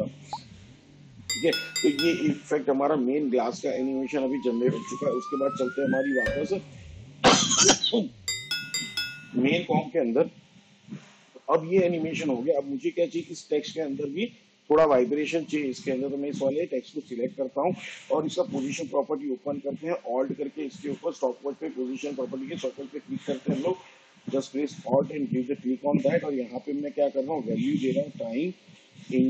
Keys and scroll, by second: 18.6 p, 26.2-27.6 typing, 28.6 shift+8.